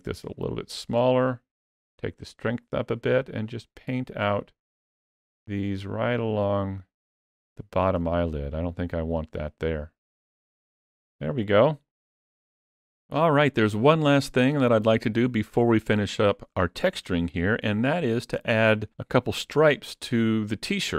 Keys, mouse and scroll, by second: 1.4 click, 3.3 click, 4.1 click, 4.7 click, 5.2 click, 6.7 click, 7.3 click, 7.8 click, 9.3 middle click, 10.6 ctrl+middle click, 11.2 middle click.